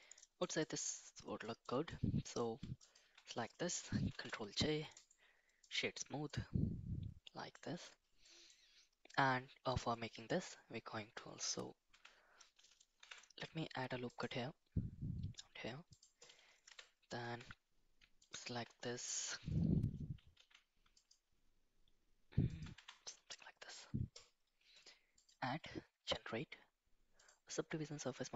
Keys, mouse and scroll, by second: 0.2 middle drag, 0.6 shift+middle drag, 1.5 shift+middle drag, 2.0-2.5 middle drag, 2.9 shift+click, 4.1 ctrl+j, 5.0 right click, 6.3-7.5 middle drag, 8.2 middle drag, 11.9 Tab, 13.0 ctrl+r, 16.7 2, 17.2 3, 18.2 alt+click, 20.4 alt+e, 22.8 Tab, 23.3 middle click, 25.2-27.4 drag.